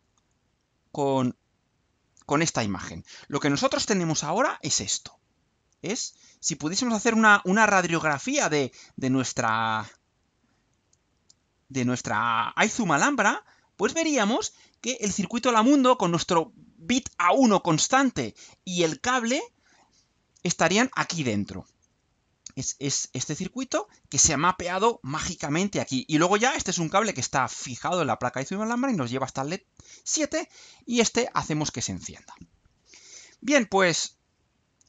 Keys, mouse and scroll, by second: 0.4 click, 1.4 click, 6.5-8.6 drag, 9.3-12.4 drag, 13.3-14.1 alt+drag, 34.7 click.